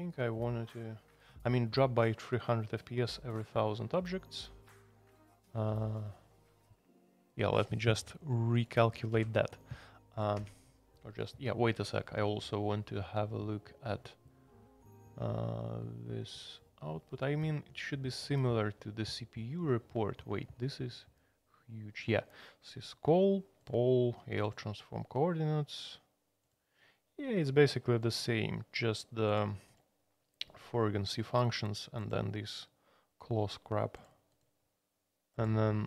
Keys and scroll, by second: 9.1 super+c, 10.3 Escape.